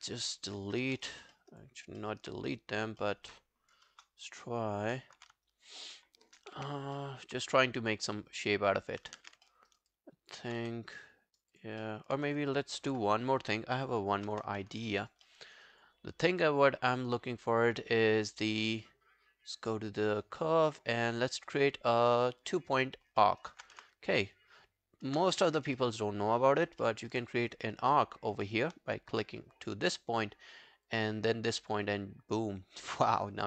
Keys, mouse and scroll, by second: 0.8 Delete, 1.0 ctrl+z, 1.3 alt+middle click, 1.7 alt+click, 2.0 alt+middle click, 3.0 alt+middle click, 3.9 ctrl+BackSpace, 5.0 alt+middle click, 5.5 shift+right click, 6.6 w, 7.0 alt+middle click, 9.2 ctrl+z, 9.5 alt+middle click, 9.7 alt+right click, 9.9 alt+click, 10.6 w, 10.9 right click, 11.8 alt+middle click, 12.9 Delete, 13.3-13.6 scroll down 1, 14.4 ctrl+i, 14.6 scroll down 1, 14.8 ctrl+scroll, 14.8 alt+click, 15.0 alt+right click, 15.3 alt+middle click, 15.5 alt+right click, 15.7 alt+click, 23.3 alt+middle click, 23.5 alt+right click, 23.8 space, 25.1 space, 25.8 alt+middle click, 26.2 alt+scroll down 1, 26.7 alt+scroll up 1, 26.9 alt+middle click, 28.3 alt+middle click, 28.5 alt+middle click.